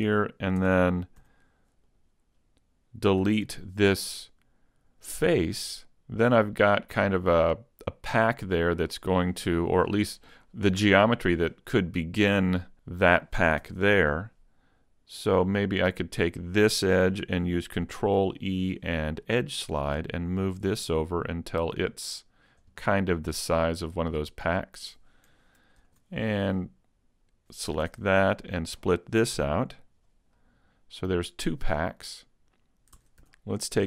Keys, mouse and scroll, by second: 0.1 ctrl+Tab, 1.9 right click, 3.2 x, 5.6 middle click, 7.4 middle click, 11.8 middle click, 13.6 ctrl+Tab, 15.5 right click, 16.0 middle click, 18.0 ctrl+e, 22.6 click, 22.8 middle click, 25.8 ctrl+r, 27.4 click, 27.9 ctrl+Tab, 28.7 right click, 29.4 x, 30.4 middle click, 32.8 ctrl+Tab, 33.0 ctrl+Tab, 33.6 right click.